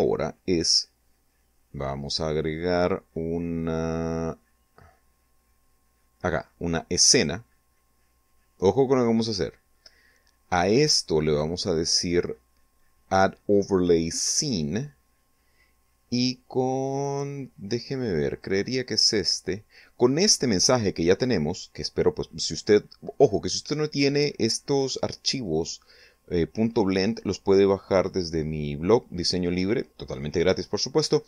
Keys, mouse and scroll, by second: 5.9 click, 10.1 click, 13.2 click, 17.1 click, 18.0 click.